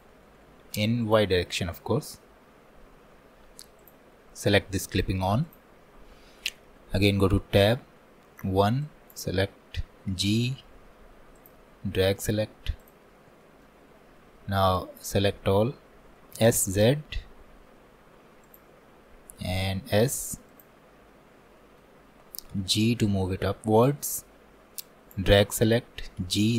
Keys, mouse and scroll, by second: 1.1-7.3 drag, 7.3 Tab, 8.5 1, 13.2 scroll down 2, 13.5-14.8 shift+middle drag, 14.8 click, 21.0 scroll up 4, 21.6 shift+middle click, 22.6 g.